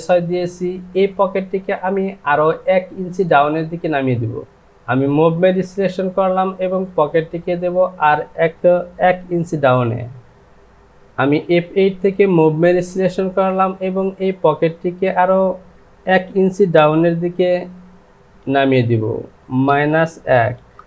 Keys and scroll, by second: 19.6 KP_Subtract, 20.3 KP_1, 20.5 Down.